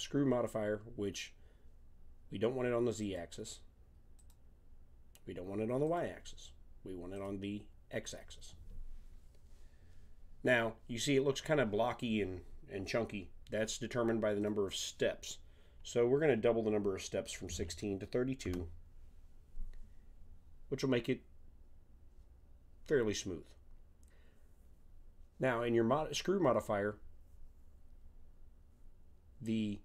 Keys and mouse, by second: 3.0-5.8 drag, 7.2 click, 14.4-16.3 drag.